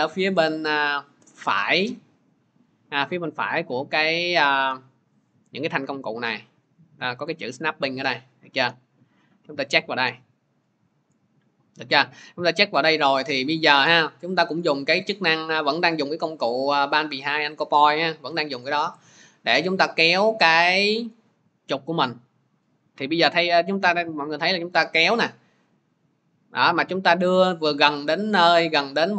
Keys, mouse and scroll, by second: 10.1-15.1 drag.